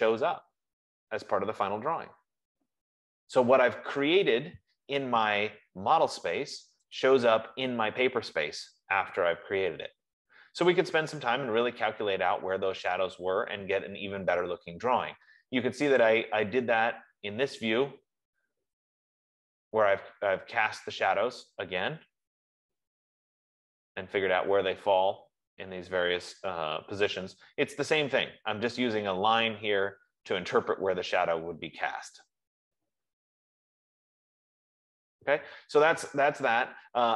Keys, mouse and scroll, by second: 0.5 scroll, 3.9-4.2 scroll, 6.2-6.5 scroll, 7.5 scroll down 2, 8.8 middle click, 16.4-19.1 drag, 19.1 middle click.